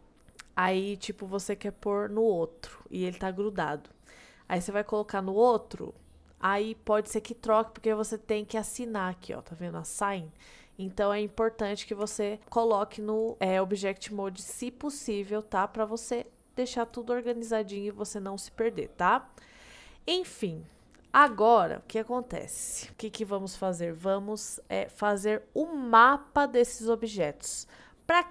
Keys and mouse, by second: 0.9 middle click, 12.1 Tab, 13.3 click, 16.2 click, 16.9 click, 19.0-20.0 middle drag, 20.5 middle drag, 21.3 KP_1.